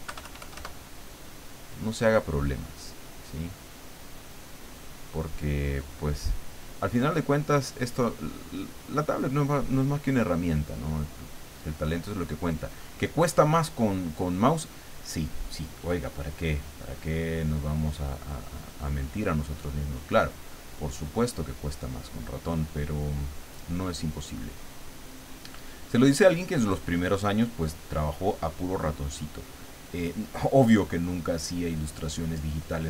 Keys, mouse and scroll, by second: 0.0 KP_Add, 0.7 middle click, 2.6 click, 3.5 click, 5.5 click, 6.3 click, 7.5-9.0 drag, 9.5-10.8 drag, 11.4-12.8 drag, 13.4-14.7 drag, 16.5-18.0 drag, 18.2 click, 18.9 click, 20.9 click, 22.1 click, 23.4 click, 25.2 click, 26.8-28.3 drag, 29.1-30.4 drag, 30.7 click, 31.9 middle click.